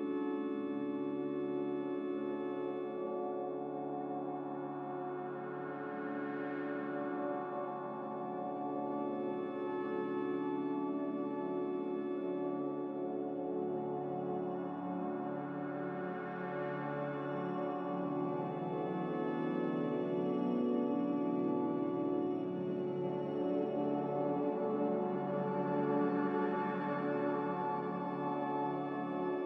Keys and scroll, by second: 8.9 a, 11.5 z, 15.9 5, 16.2 Return, 22.4 z.